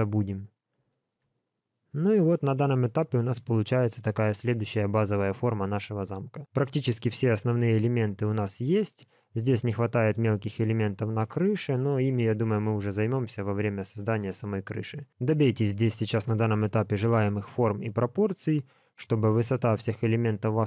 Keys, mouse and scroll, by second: 0.2 scroll down 2, 0.8 shift+middle click, 1.3 scroll down 1, 1.7 middle click, 2.9 middle click, 3.5 middle click, 18.8 middle click, 20.5 middle click.